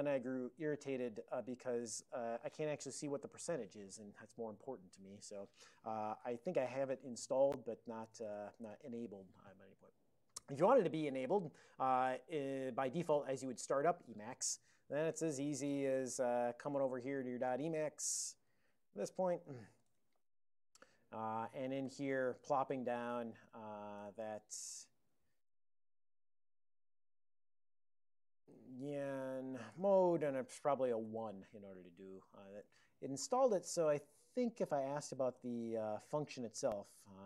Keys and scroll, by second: 6.2 alt+x, 6.7-8.6 typing, 8.7 Return, 14.8-15.7 typing, 16.3 ctrl+g, 16.5 ctrl+g, 16.9 ctrl+x, 17.1-20.5 typing, 21.5 ctrl+a, 21.7 ctrl+p, 21.9 ctrl+o, 22.1 ctrl+o, 22.6 (, 23.6 ctrl+a, 23.8 ctrl+k, 24.1 ctrl+n, 24.3 ctrl+n, 26.8 ctrl+o, 28.6 ctrl+o, 29.1-33.0 typing, 33.4 ctrl+x, 35.5 ctrl+h.